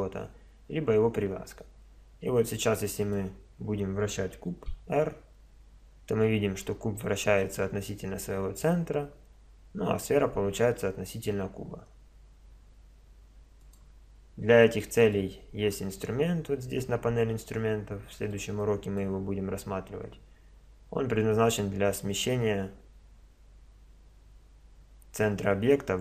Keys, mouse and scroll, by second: 1.7 middle click, 2.6-4.5 middle drag, 4.5 r, 14.6-16.5 middle drag, 17.7-20.1 middle drag.